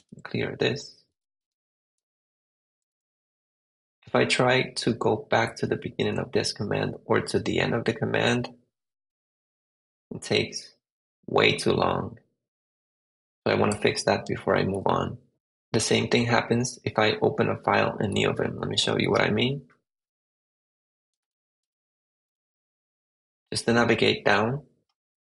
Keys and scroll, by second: 0.0-0.3 typing, 1.0 super+v, 1.3 Return, 2.7 Up, 4.5 Left, 5.5 Left, 6.1 Right, 14.6 super+Tab, 19.0 super+Tab, 20.4 ctrl+c, 20.7-22.3 typing.